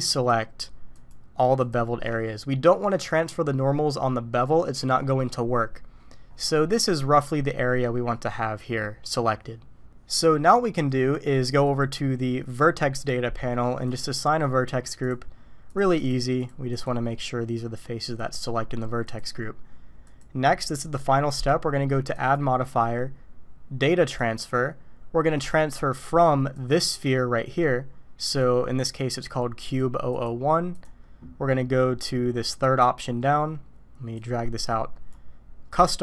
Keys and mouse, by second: 0.1 alt+shift+click, 1.7 alt+shift+click, 11.7 click, 13.9 click, 15.0 drag, 15.7-16.1 drag, 16.4-16.8 drag, 19.0 click, 20.1-24.2 drag, 26.5 click, 28.3 click, 30.1 click, 32.6 click, 34.2-35.3 drag, 35.7 click.